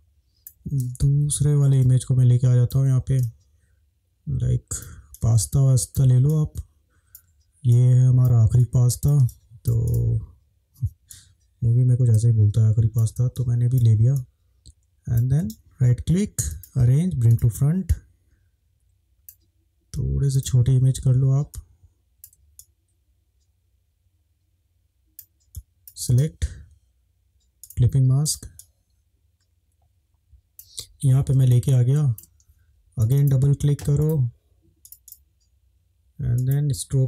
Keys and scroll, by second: 1.2 ctrl+shift+-, 1.8 ctrl+shift+space, 3.2 ctrl+shift+space, 6.2 space.